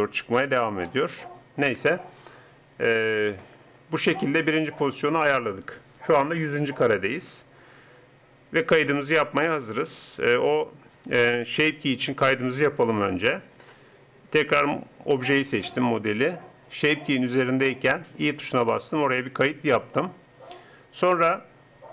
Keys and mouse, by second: 0.9 click, 1.7 KP_0, 18.6 i.